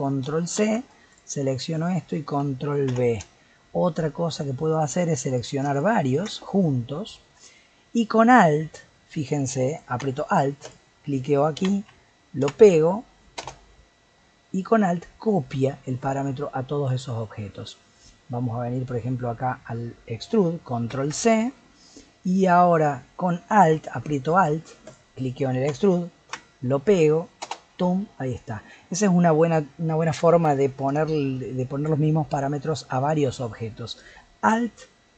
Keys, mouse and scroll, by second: 0.2 ctrl+c, 0.6 ctrl+c, 1.1 click, 2.9 ctrl+v, 5.3 click, 5.7 shift+click, 6.1 shift+click, 10.6-13.8 alt+drag, 20.9 ctrl+c, 24.8-27.9 alt+drag, 28.3-34.5 middle drag.